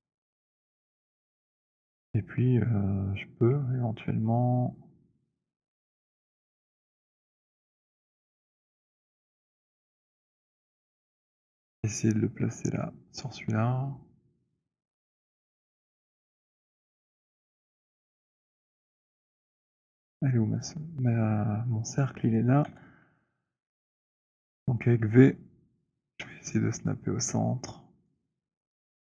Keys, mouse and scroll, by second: 0.3 middle click, 0.5-1.4 scroll, 1.7-2.7 scroll, 9.2 shift+click, 11.7 alt+click, 13.3 click, 16.3 click, 17.9 scroll, 18.6 scroll, 19.5 click, 22.7 w, 23.9 v, 24.4-27.9 v, 25.2 v, 28.1 click, 28.1 v, 28.6-29.1 scroll.